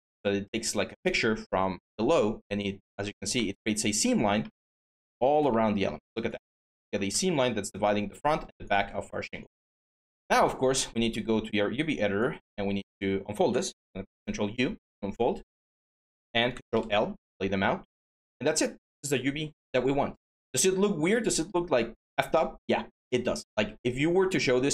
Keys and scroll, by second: 8.7 q, 13.5 ctrl+u, 16.5 ctrl+l.